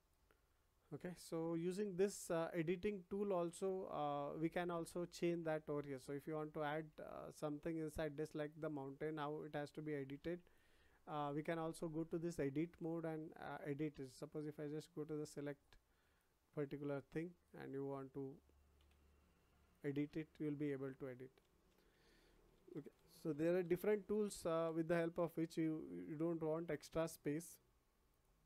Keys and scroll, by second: 18.8 Delete, 21.4 ctrl+z.